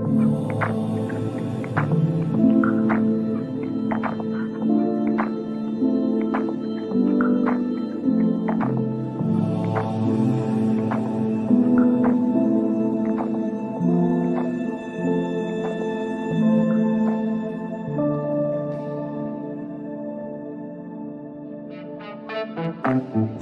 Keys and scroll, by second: 12.4 Delete, 14.1 shift+F2, 14.6 Escape, 15.4 F9.